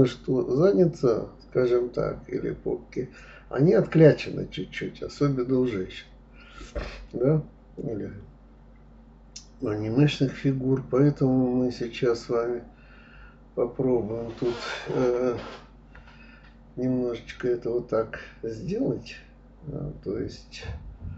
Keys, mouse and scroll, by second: 1.9 s, 5.0 click, 5.2-6.7 middle drag, 7.5 click, 8.3 click, 8.9 click, 9.3 shift+click, 9.6 shift+click, 9.9 shift+click, 10.5 shift+click, 11.0 shift+click, 11.3 shift+click, 11.6 shift+click, 12.0-13.4 middle drag, 13.4-15.4 drag, 18.2 click, 18.4-20.2 middle drag, 20.2 click, 20.9 shift+click.